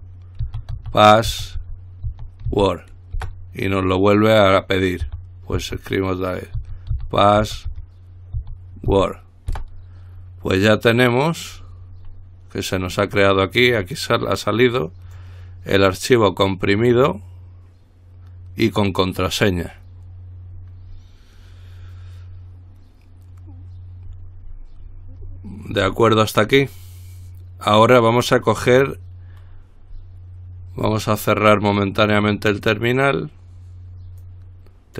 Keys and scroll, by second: 0.0-2.7 typing, 3.4 Return, 5.0-5.8 typing, 6.8-9.7 typing.